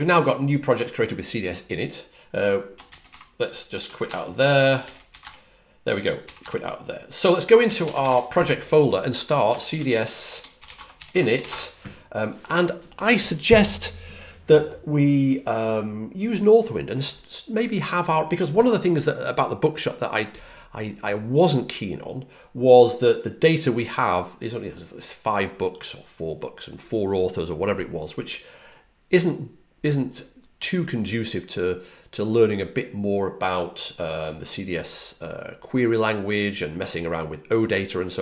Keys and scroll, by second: 3.7 BackSpace, 4.0 Return, 5.1 Return, 6.1 q, 6.3 Return, 7.3-11.8 typing.